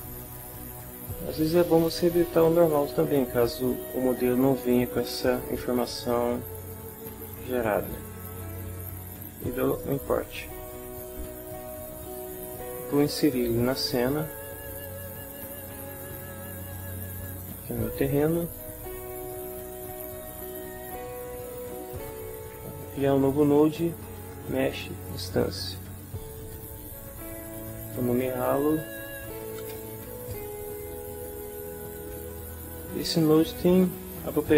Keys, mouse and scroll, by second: 4.6 click, 9.7 click, 14.5 click, 16.9 click, 20.7 click, 23.8-25.0 typing, 26.2 click, 28.0 click, 28.9-30.6 typing.